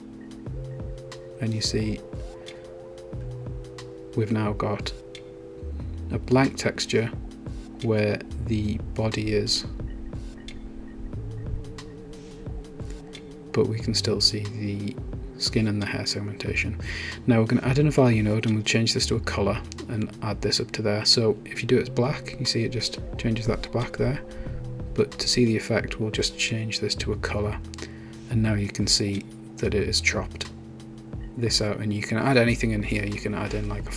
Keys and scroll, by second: 14.6-16.3 typing.